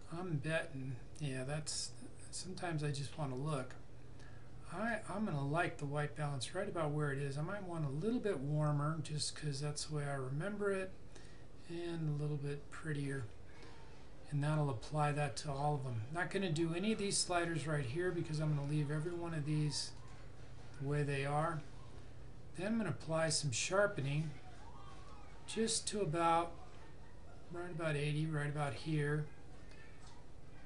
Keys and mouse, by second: 19.1 click, 22.6 click.